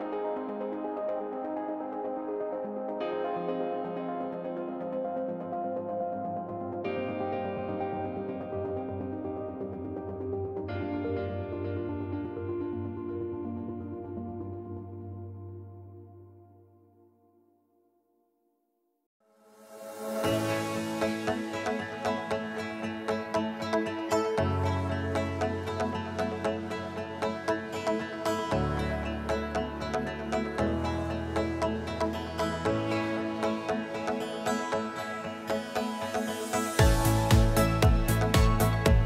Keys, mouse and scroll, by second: 1.8 click, 3.1 click, 3.7 click, 3.7 Delete, 4.3 click, 4.3 Delete, 5.6 click, 5.7 click, 7.4 click, 8.2 click, 8.3 click, 9.2 click, 10.5 click, 11.8 click, 12.6 click, 17.5 click, 18.0 F1, 18.9-20.8 click, 20.2 -, 21.0 click, 21.7 ctrl+d, 22.6 click, 23.2 h, 24.2 click, 24.6 click, 26.2 click, 28.0 click, 30.2 click, 31.3 F2, 33.2 click, 33.4 click, 35.4 click, 37.0 click, 37.5 =, 37.6 click, 37.6-38.1 =, 37.8 click.